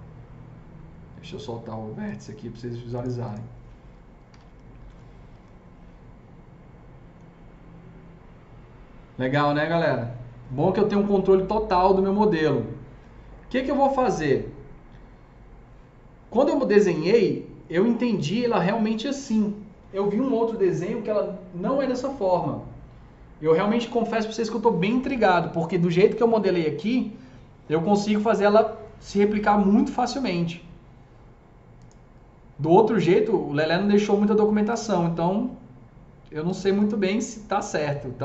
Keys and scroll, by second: 4.0-4.7 typing, 5.2 F3, 7.1 typing.